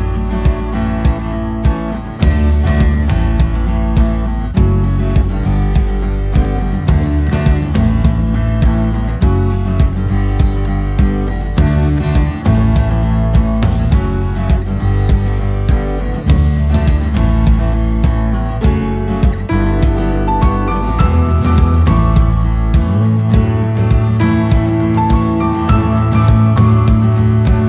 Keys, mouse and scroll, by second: 6.2 middle click, 7.8 c, 14.4 middle click, 17.1 middle click, 18.0 i, 19.4 middle click, 21.0 alt+e, 23.9 middle click, 25.1 i.